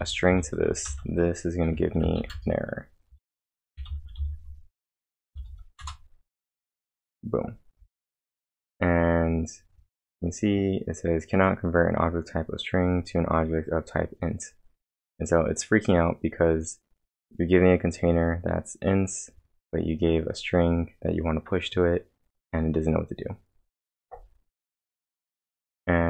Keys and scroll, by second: 0.0-0.9 typing, 2.3-5.3 typing, 5.8 Return.